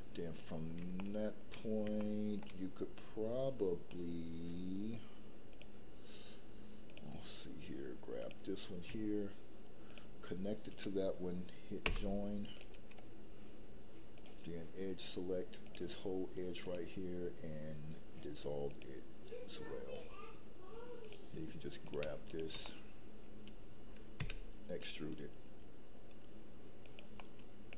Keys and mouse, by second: 1.0 shift+middle click, 1.9 shift+middle click, 5.4 click, 8.2 click, 11.8 j, 12.5 right click, 14.1 click, 16.7-18.8 right drag, 21.0 click, 21.8 click, 22.2 shift+click, 22.6 middle click, 24.2 e, 27.2 middle click.